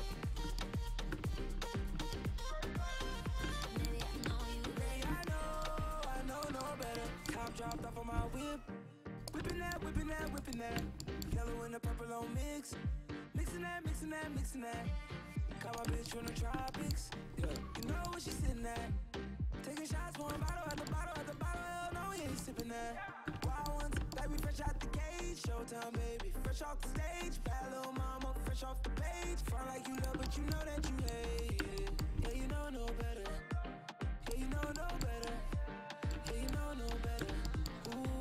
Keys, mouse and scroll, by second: 1.1-3.9 middle drag, 5.0-6.7 middle drag, 9.3 c, 10.0 c, 11.4 c, 15.9-17.8 drag, 16.2-18.6 middle drag, 16.3 right click, 18.6 c, 24.7 c, 32.3 c, 38.1 middle click.